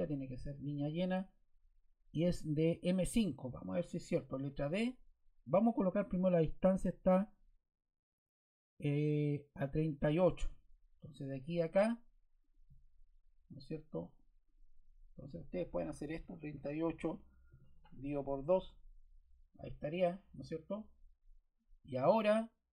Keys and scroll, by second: 4.3 d, 16.1 3, 16.4 8, 17.4 shift+7, 18.0 2, 18.5 Return.